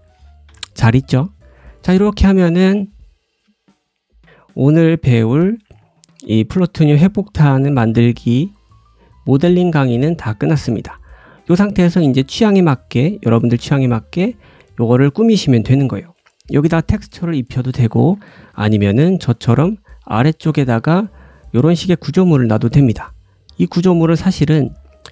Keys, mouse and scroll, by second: 0.4 ctrl+z, 1.1 click, 1.4 `, 1.8-5.4 right drag, 1.8-2.4 scroll down 2, 2.4-2.9 scroll down 3, 3.1 click, 3.1 shift+middle click, 3.1 scroll down 1, 3.3 g, 4.2 click, 4.3 scroll down 1, 4.6 shift+middle click, 5.0 middle click, 5.3-5.8 scroll up 3, 5.7 shift+middle click, 5.8 middle click, 5.8 scroll down 1, 6.0 scroll up 1, 6.3 click, 6.6 g, 7.4 click, 7.6 g, 8.3 click, 8.6 g, 9.1 click, 9.3 g, 9.9 middle click, 13.7 click, 14.0 g, 16.8-18.7 drag, 17.7 ctrl+z, 17.9 ctrl+z, 18.2 ctrl+z, 18.4 ctrl+z, 18.7 ctrl+z, 18.9 ctrl+z, 19.1 ctrl+z, 19.4 middle click, 19.7-20.1 scroll up 2, 20.1 shift+middle click, 20.5 middle click, 21.1 click, 21.6-22.4 drag, 22.6-25.1 drag, 22.6 g.